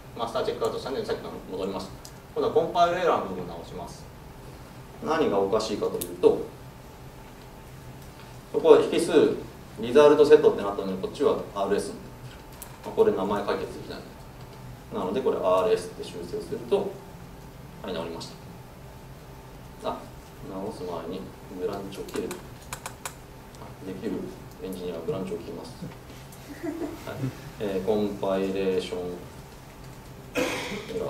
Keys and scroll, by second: 6.1 ctrl+shift+super+F12, 20.3 super+z, 22.4 super+z.